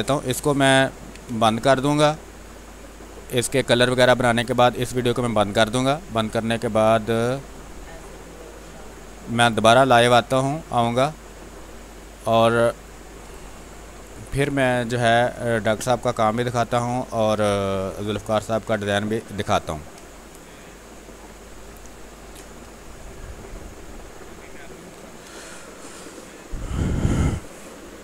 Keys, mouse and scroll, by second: 0.9 b, 1.2 space, 1.4 click, 2.0 space, 2.4-4.7 drag, 4.7 space, 5.1 click, 5.2 space, 5.6 x, 6.0 click, 7.1 space, 7.6 click, 11.2 click, 11.9 x, 12.3 click, 13.2 space, 13.7 alt+click, 14.1 click, 16.6 click, 17.4 space, 19.9 space, 20.2 alt+click, 22.1 ctrl+d, 25.3 space, 25.7 ctrl+click.